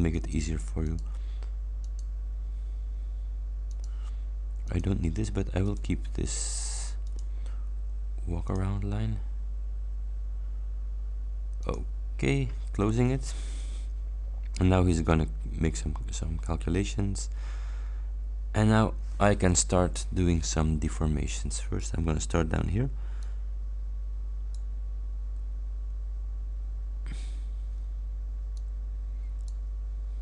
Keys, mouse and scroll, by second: 0.2 click, 0.9 click, 1.8 click, 3.7 click, 4.7 click, 5.7 click, 7.2 click, 8.6 click, 9.0 scroll up 1, 11.7 click, 20.3 scroll down 1, 21.0 scroll up 2, 23.3-24.8 drag, 28.6-29.7 drag.